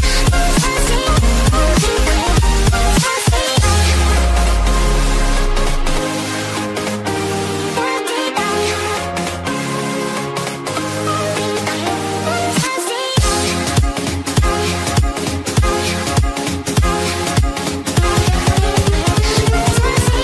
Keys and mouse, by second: 0.0-2.1 typing, 3.9 click, 6.6 click, 7.9 click, 9.2-10.3 typing, 9.8 click, 12.4 click, 13.1 click, 16.0 click, 17.2 click, 17.2-20.2 typing.